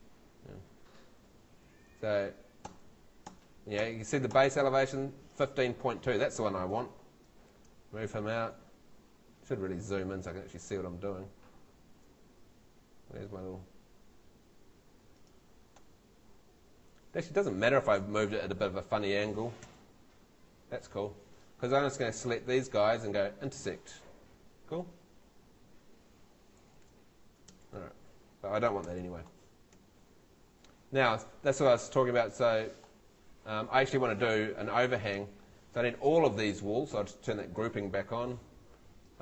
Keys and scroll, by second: 0.5 F2, 1.4 Tab, 19.6 F3, 25.3 Escape, 26.6 super+z, 28.9 F3, 29.7 Escape.